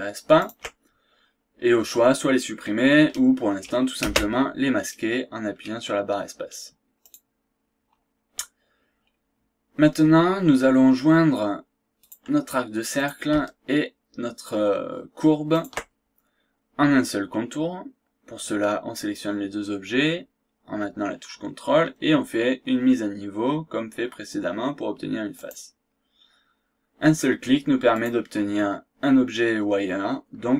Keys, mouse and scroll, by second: 0.4 ctrl+click, 4.0 space, 7.0 click, 8.8-9.2 scroll down 2, 9.4 scroll up 2, 9.7 scroll down 2, 10.1-10.4 scroll up 1, 10.6 scroll down 1, 12.0 click, 13.0 click, 15.6 ctrl+click, 16.6 scroll up 1, 17.0 scroll down 2, 17.3 scroll up 2, 25.4 click, 27.9 click.